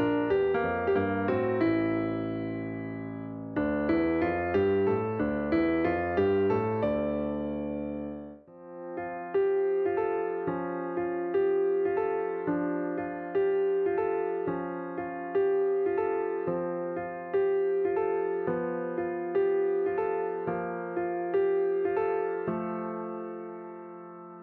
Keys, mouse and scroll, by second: 0.3 alt+h, 3.1-5.8 drag, 5.8-6.5 scroll up 2, 6.7-8.3 shift+middle drag, 8.3-9.2 drag, 9.2-12.5 middle drag, 14.4 click.